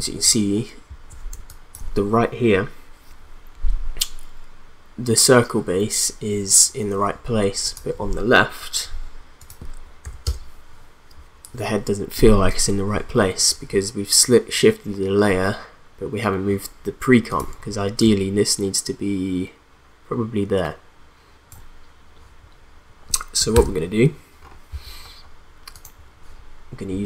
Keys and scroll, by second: 1.4 space, 10.0 0, 10.3 Return, 23.5 ctrl+z.